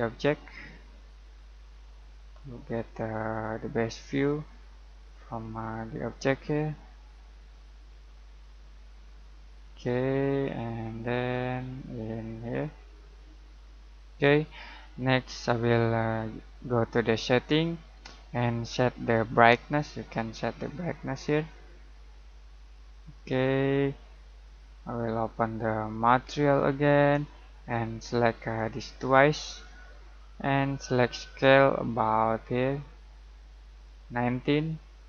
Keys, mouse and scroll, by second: 16.7 click, 19.8-25.9 drag, 28.6 click, 31.4-35.0 drag.